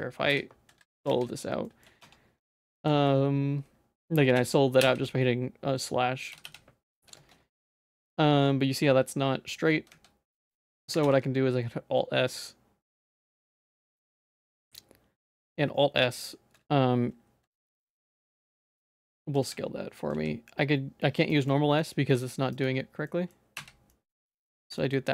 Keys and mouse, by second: 0.3 /, 1.1 z, 1.7 shift+middle click, 2.1 Tab, 4.4 /, 4.8 /, 7.6 shift+middle click, 9.9 z, 11.1 alt+s, 13.8 z, 14.2 z, 17.6 alt+s, 19.4 z, 20.1 s, 21.5 middle click, 22.2 s, 23.1 middle click, 23.6 /, 23.9 middle click, 24.8 shift+middle click.